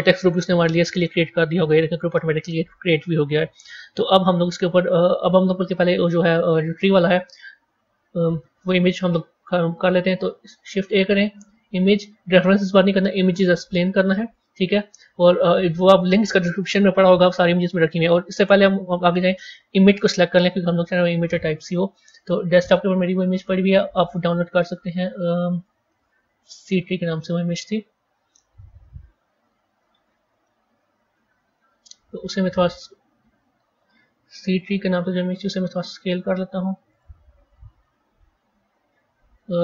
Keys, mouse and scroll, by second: 5.2-9.3 middle drag, 9.3 shift+a, 29.5-30.3 scroll up 8, 30.3-32.4 middle drag, 32.4 z, 34.5 click, 35.3 s.